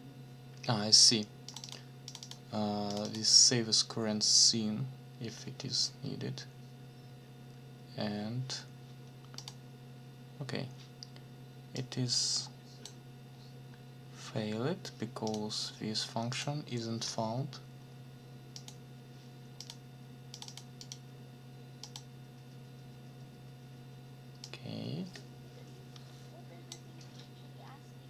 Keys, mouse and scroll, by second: 1.5 click, 2.1 click, 2.9 click, 9.4 click, 11.7-13.0 drag, 15.3 click, 16.3 click, 18.5 click, 19.6 click, 20.3 click, 20.8 click, 21.8 click, 24.4-26.9 drag.